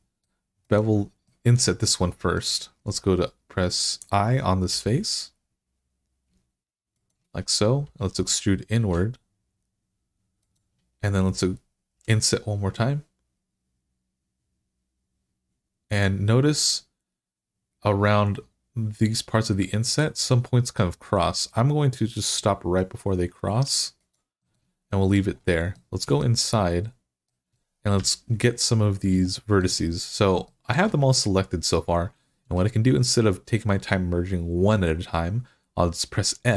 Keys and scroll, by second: 4.5 i, 8.0 e, 11.8 i, 27.8 1.